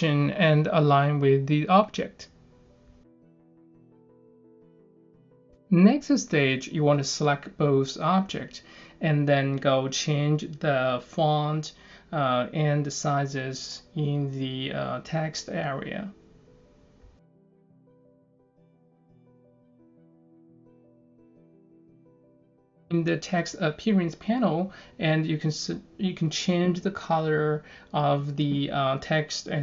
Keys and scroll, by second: 10.6-11.5 typing.